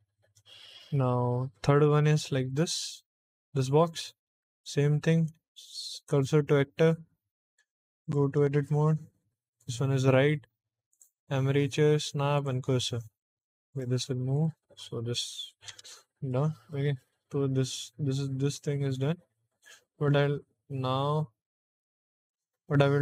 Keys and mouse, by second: 0.1 middle click, 0.9-2.0 middle drag, 2.4 click, 3.1 click, 3.4 click, 5.2 shift+s, 7.9 click, 8.3 Tab, 9.5 click, 10.8-12.4 drag, 12.9 Tab, 13.6 click, 14.2 click, 15.6 BackSpace, 16.2 middle click.